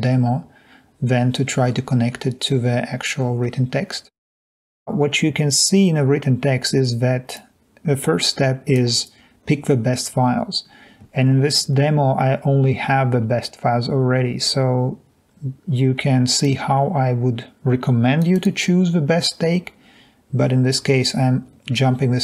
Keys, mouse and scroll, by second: 3.2-3.8 scroll up 2, 17.0-18.2 drag, 18.3 click.